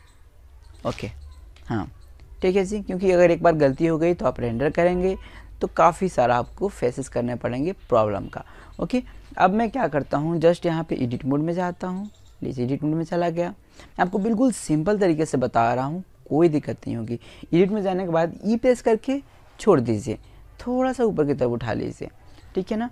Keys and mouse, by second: 4.9 middle click, 5.5-8.2 middle drag, 8.7 click, 9.7 click, 16.5 e, 17.4-19.2 right drag, 18.5 click, 20.7-21.7 middle drag, 22.4 s.